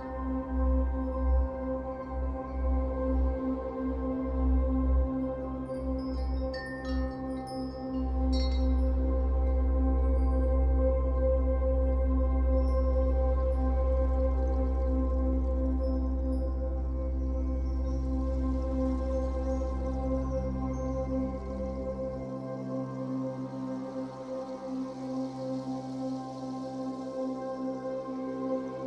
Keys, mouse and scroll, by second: 1.2-2.4 middle drag, 2.4-3.9 drag, 3.9-5.2 middle drag, 5.2-7.4 drag, 6.8-7.4 scroll down 2, 7.4-13.1 middle drag, 7.7 scroll up 2, 8.4-8.8 scroll up 2, 9.6-10.4 scroll up 2, 11.6-12.0 scroll up 2, 13.1-16.5 drag, 16.5-18.5 shift+middle drag, 18.5-20.5 drag, 20.5-22.2 middle drag, 22.2-24.3 drag, 24.1 scroll down 2, 24.3-28.0 middle drag, 26.2 scroll up 2, 26.8-27.5 scroll up 2, 27.5-28.0 scroll up 1, 28.0-28.8 drag.